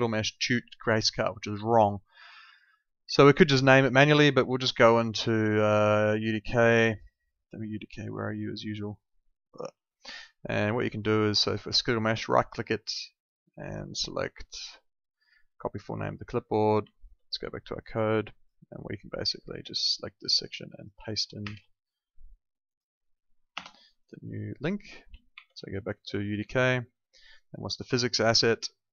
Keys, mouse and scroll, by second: 2.2 alt+Tab, 9.4 alt+click, 10.9 click, 12.2 right click, 15.6 click, 16.9 alt+Tab, 17.7 alt+click, 21.4 ctrl+v, 22.6 click, 23.5 BackSpace, 23.9 click, 25.3 alt+Tab, 27.4 click, 27.9 right click.